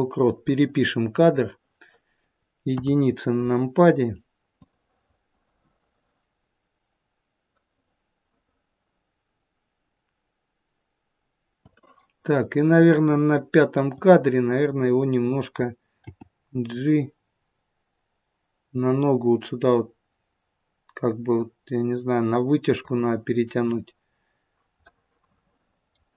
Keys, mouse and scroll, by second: 2.5 KP_1, 4.5 click, 13.7 click, 15.9 g, 24.7 middle click.